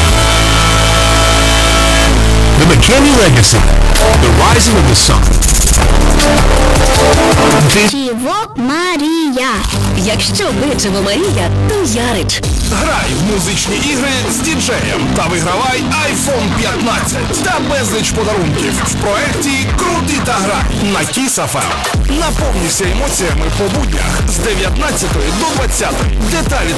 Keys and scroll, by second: 8.4 Page_Down.